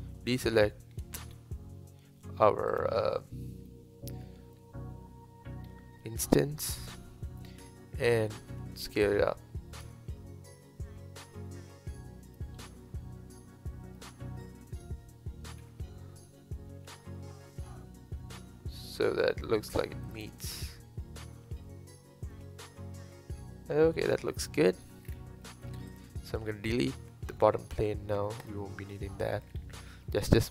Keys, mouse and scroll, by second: 0.4 shift+click, 1.2 s, 3.7-5.6 middle drag, 5.6-6.0 scroll up 1, 6.0-7.6 middle drag, 7.6 KP_1, 8.6 s, 12.6-15.6 middle drag, 15.6 KP_7, 16.7 s, 20.4-23.4 middle drag, 25.1-25.4 scroll down 3, 25.4 middle click, 25.9 click, 27.4 middle click, 27.8 x, 28.9-29.5 middle drag, 29.5-29.9 scroll up 3, 29.9-30.5 middle drag.